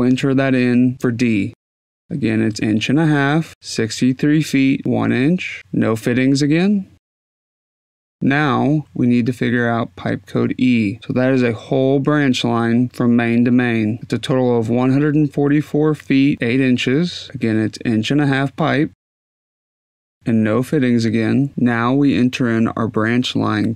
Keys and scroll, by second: 2.0 ., 2.2 5, 3.4 Tab, 3.6-4.9 typing, 5.7 Tab, 16.4-17.4 typing, 19.1 Tab, 19.4-21.5 typing, 23.4 shift+a.